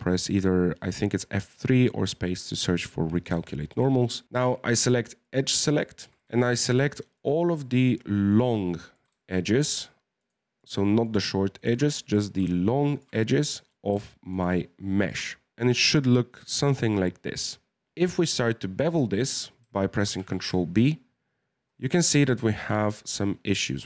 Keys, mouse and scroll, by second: 3.4-5.2 shift+middle drag, 5.2 click, 5.8 shift+middle click, 6.4 alt+shift+right click, 7.1 alt+shift+right click, 7.4 alt+shift+right click, 8.3 alt+shift+right click, 8.5-10.2 middle drag, 10.2 alt+shift+right click, 10.6 alt+shift+right click, 11.0 alt+shift+right click, 11.5 alt+shift+right click, 11.8-12.9 middle drag, 12.9 alt+shift+right click, 13.3 scroll up 4, 13.5 middle click, 14.3 alt+shift+right click, 15.0 alt+shift+right click, 15.2-17.6 middle drag, 17.9-20.0 scroll up 2, 20.0 scroll up 1, 20.0 ctrl+b.